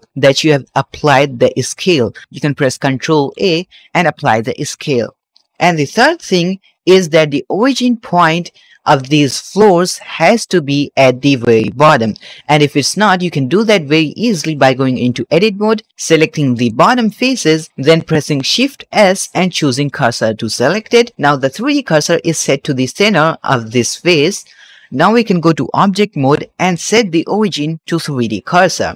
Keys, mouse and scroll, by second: 3.2 ctrl+a, 6.8 KP_Divide, 9.7 click, 10.2-11.3 middle drag, 11.4-11.9 scroll up 2, 11.9-12.4 middle drag, 15.0 Tab, 16.4 click, 18.7 shift+s, 25.6 Tab, 26.4-28.1 right drag, 28.1-28.9 middle drag.